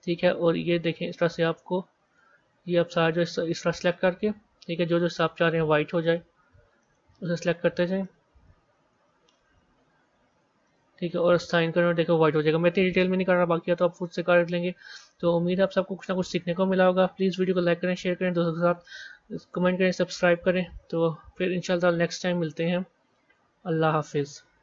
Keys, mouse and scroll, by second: 7.1 scroll down 2, 8.0-9.3 middle drag, 11.5 click, 13.3 Tab, 14.2 z, 14.9-17.3 middle drag, 17.3 click, 17.7 scroll down 3, 18.5-20.4 middle drag, 21.8 scroll down 3, 22.7 scroll up 4.